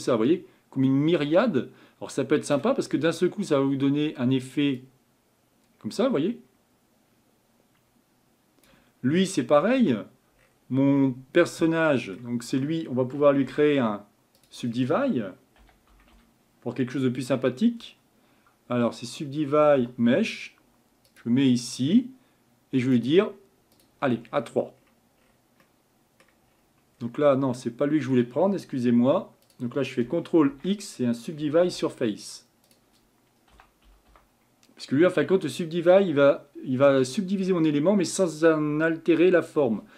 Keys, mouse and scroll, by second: 3.0 Tab, 4.9-8.6 drag, 9.6-10.2 scroll down 4, 23.1-24.2 drag, 24.2-25.2 scroll up 9, 25.2-25.6 scroll down 2, 25.6-26.5 middle drag, 26.5-27.0 scroll up 2, 27.0-27.6 scroll down 2, 27.6-30.5 middle drag, 30.5 ctrl+x.